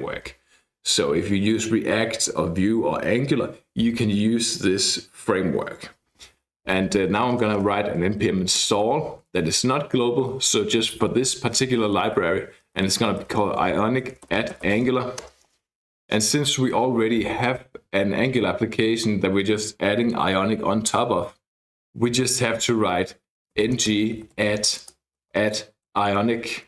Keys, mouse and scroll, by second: 6.9-9.1 typing, 12.5-15.2 typing, 15.3 Return, 23.4-26.6 typing.